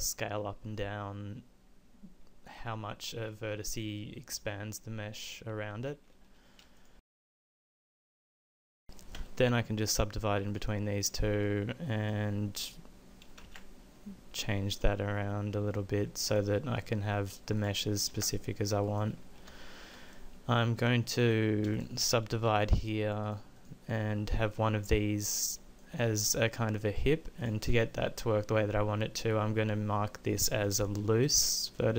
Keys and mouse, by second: 9.1 w, 13.4 ctrl+a, 16.3 click, 17.6 middle click, 18.1 ctrl+a, 22.5 w.